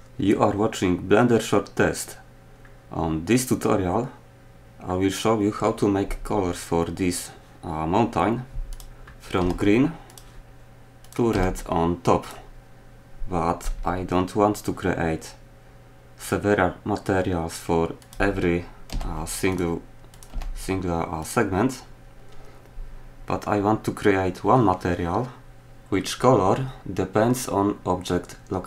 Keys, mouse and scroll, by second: 2.8-3.1 middle drag, 3.5 middle click, 9.4 g, 11.0 right click, 11.3 g, 18.9 g, 20.3 g.